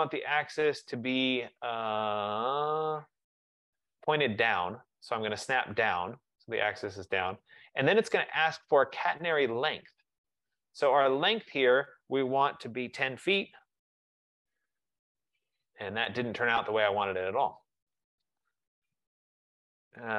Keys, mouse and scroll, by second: 5.7-10.8 drag, 13.0-13.7 typing, 13.9 Return, 14.8 F15, 15.3-15.8 scroll, 16.1-16.8 scroll, 17.9-19.9 typing, 18.4 middle click.